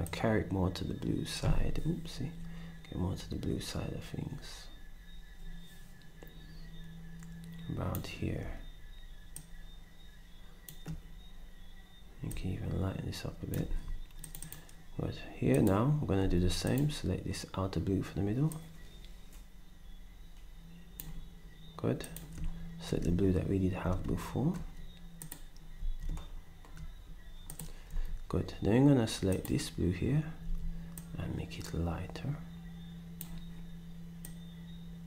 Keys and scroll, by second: 13.6 s, 16.4 d, 25.8 ctrl+shift+s, 27.9 d, 30.5 s.